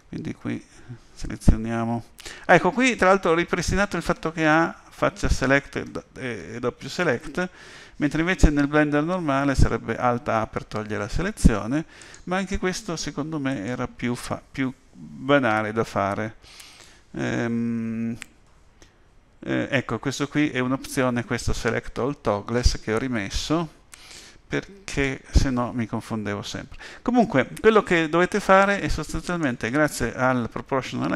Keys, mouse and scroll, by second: 0.4 a, 2.1-2.7 scroll down 1, 4.1-7.1 typing, 12.0 click, 29.3 click.